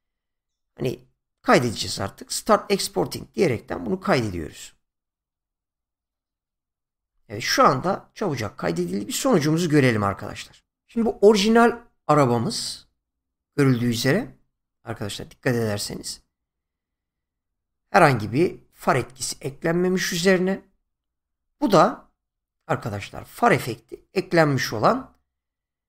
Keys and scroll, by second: 10.9 space, 21.4 space.